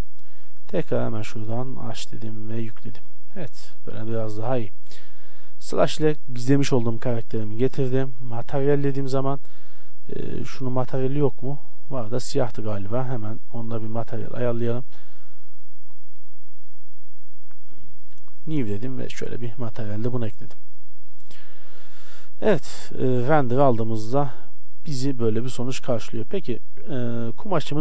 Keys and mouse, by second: 1.0 click, 2.3-3.1 drag, 3.4 a, 5.2 KP_Divide, 5.6 a, 9.6-11.1 right drag, 14.5-15.8 right drag, 15.8-17.5 middle drag, 21.0 a, 21.9 shift+z, 26.0 shift+z.